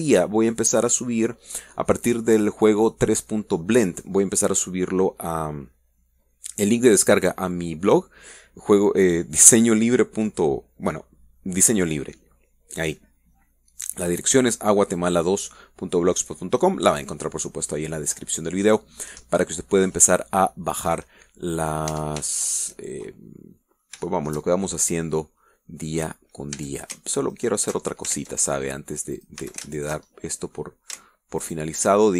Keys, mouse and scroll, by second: 22.8-23.1 scroll up 1, 23.2 Tab, 23.6 shift+middle click, 24.4 shift+middle click, 25.4 shift+middle click, 26.7-27.9 middle drag, 27.9 a, 28.7 alt+shift+right click, 29.5 ctrl+alt+shift+Tab, 30.5 click, 30.8 a, 31.1 alt+shift+right click, 31.5 alt+shift+middle click.